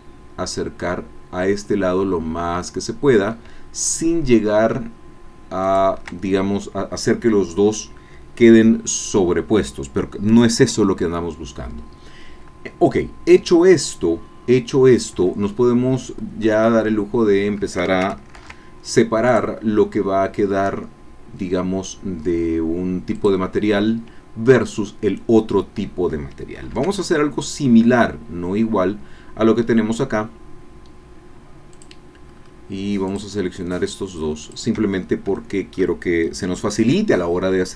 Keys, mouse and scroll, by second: 5.6 shift+click, 18.4 ctrl+r, 19.3 click, 23.3 click, 26.6 ctrl+r, 27.5 click, 31.9 click, 32.3-32.6 scroll up 2, 33.1 click, 34.4 shift+click, 35.0 shift+scroll down 2, 35.3 shift+click.